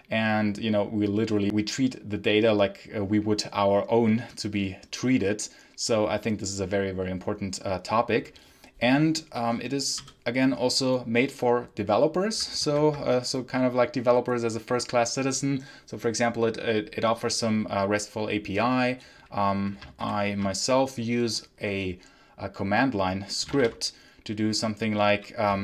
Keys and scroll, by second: 12.5 ctrl+Page_Down, 19.9 h, 23.0-23.9 typing.